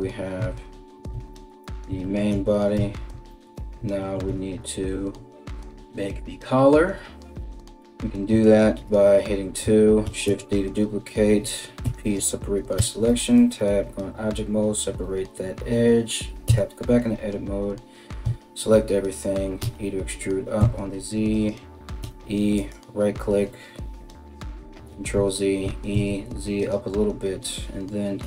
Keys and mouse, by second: 0.0 KP_1, 2.4 Tab, 7.4 2, 8.0 alt+right click, 9.6 shift+d, 11.4 p, 12.4 Tab, 12.9 right click, 16.1 Tab, 17.8 a, 19.2 e, 21.6 e, 24.5 ctrl+z, 25.2 e, 27.8 o.